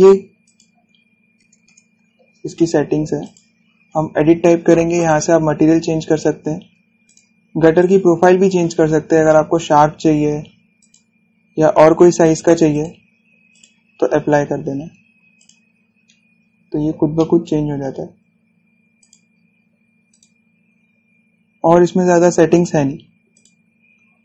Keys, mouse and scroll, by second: 0.2 click, 2.3 Return, 3.9 click, 7.7 click, 11.4 click, 14.8 scroll down 1, 15.3 scroll down 1, 15.6-16.0 scroll up 1, 16.0 click, 17.4-17.8 scroll down 1, 17.8 shift+middle click, 18.8-19.7 scroll up 1, 19.7 click, 22.0-23.1 scroll down 1, 23.1 click.